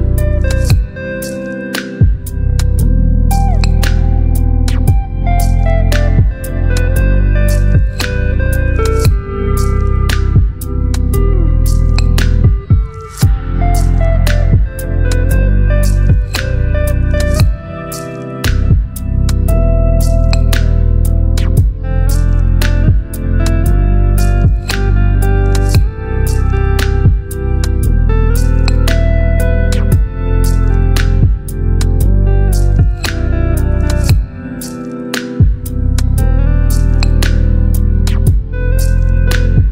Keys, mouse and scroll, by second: 10.4-12.1 drag, 13.6 Delete, 15.2 ctrl+d, 17.3 v, 20.2 v, 20.5 ctrl+t, 23.3 ctrl+t, 23.3-24.4 drag, 29.9 Up, 35.5 shift+click, 37.2 ctrl+g, 39.5 click.